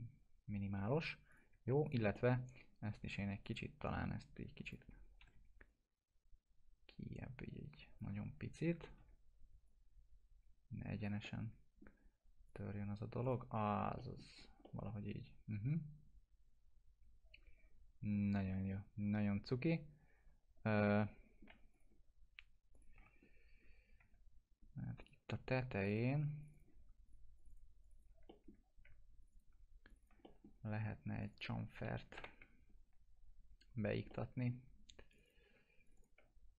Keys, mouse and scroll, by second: 1.3 click, 1.9 shift+click, 2.1 alt+middle click, 3.4 click, 5.0-5.8 typing, 5.0 scroll up 1, 5.7-8.2 drag, 8.8 ctrl+z, 9.7-11.2 drag, 11.2-11.9 alt+middle click, 12.5 click, 13.5 scroll down 1, 13.7 F4, 14.0 middle click, 14.3 scroll down 1, 14.6-21.5 alt+middle drag, 21.7 click, 23.0 F4, 23.2 scroll up 1, 24.0 2, 25.0 click, 26.4 ctrl+click, 28.3 alt+middle click, 29.2 ctrl+click, 30.2 alt+middle click, 31.2 ctrl+click, 32.2 ctrl+BackSpace, 34.1-34.7 alt+middle drag, 35.1 click.